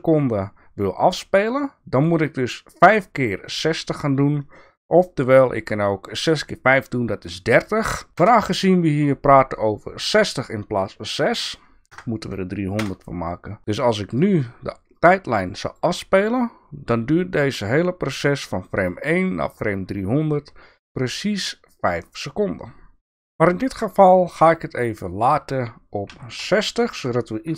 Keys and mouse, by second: 7.5-13.7 drag, 14.9 click, 17.6-19.6 drag.